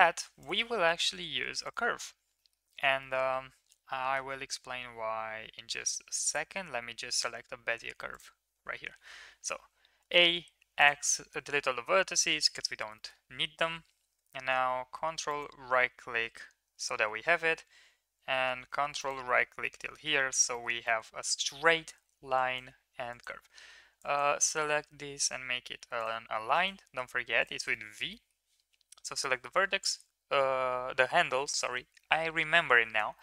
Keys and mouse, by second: 0.1 3, 0.3 click, 1.1 shift+s, 1.8 Tab, 2.3 middle click, 3.0 shift+middle click, 4.1 shift+a, 8.8 Tab, 9.8 a, 10.0 x, 12.1 KP_3, 12.9 shift+middle click, 15.2 ctrl+right click, 19.6-19.9 middle drag, 20.5 shift+middle click, 20.8 middle drag, 22.5 click, 24.1 click, 24.7 v, 26.6 click, 26.7 v, 27.6 middle click, 28.1 middle drag, 33.1 shift+middle drag.